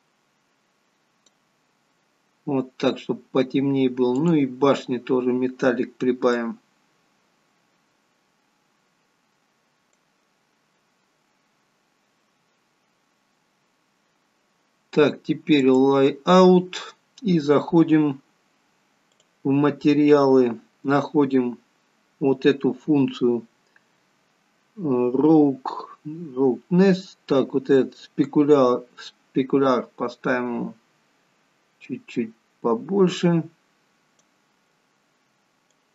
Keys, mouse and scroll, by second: 15.6 click, 19.0 click, 20.6 scroll down 3, 21.4-22.5 scroll down 7, 28.2 click.